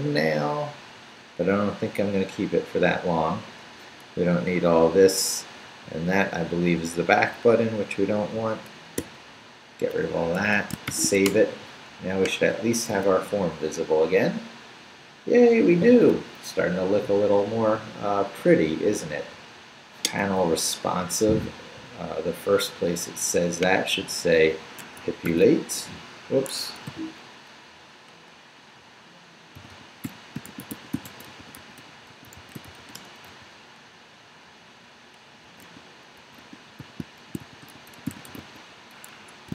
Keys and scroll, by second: 0.2 shift+Down, 3.0 Down, 4.9 Up, 6.1 Down, 9.0 d, 10.4 Escape, 10.9 shift+;, 11.2 shift+w, 11.3 Return, 12.9 super+r, 24.8 Escape, 26.5 Escape, 26.9 u, 29.3-33.8 typing, 35.2-39.5 typing, 39.1 Escape.